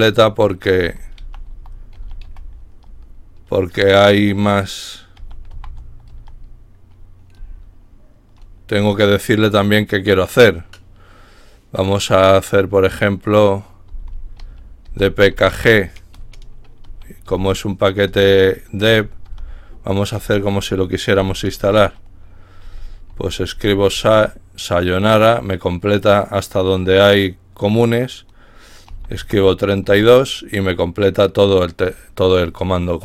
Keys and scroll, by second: 1.6-2.7 typing, 4.3-5.7 typing, 6.1 Tab, 7.8 typing, 13.9-15.8 typing, 16.9-21.1 typing, 22.5-27.0 typing, 24.0 Tab, 28.9-29.3 typing, 29.8 Tab, 32.3 typing.